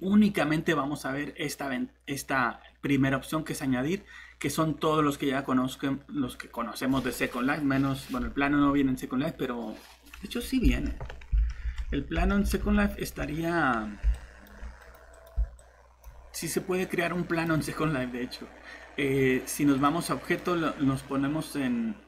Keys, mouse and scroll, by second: 10.7 alt+shift+Tab, 11.4 alt+Tab, 12.2 alt+Tab, 14.9 right click, 15.1 click, 16.9 typing, 19.3-20.1 typing.